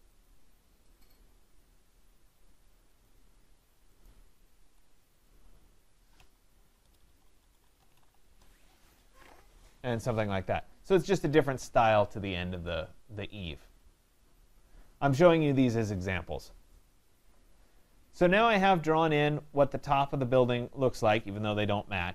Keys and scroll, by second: 4.5 Escape, 6.8 BackSpace.